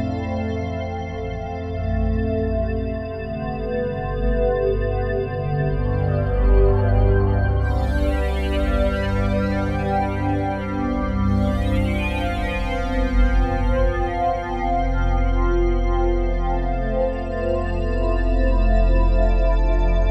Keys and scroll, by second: 11.1 F4, 14.5 c.